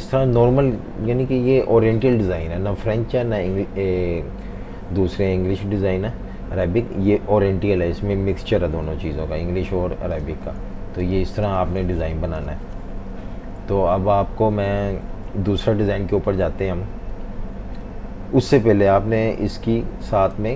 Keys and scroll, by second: 10.4-12.5 typing, 19.7 super+-, 20.4-20.5 typing.